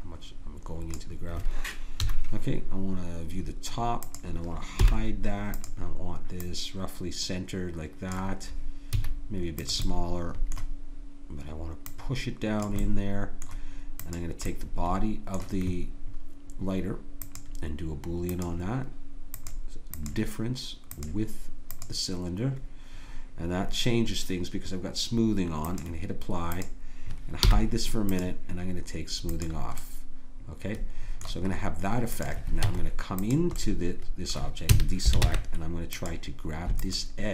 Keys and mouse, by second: 2.0 KP_7, 4.1-8.3 drag, 4.8 h, 9.0 s, 9.9 click, 11.9-22.6 drag, 27.4 h, 32.7 Tab, 34.7 a, 35.2 ctrl+Tab.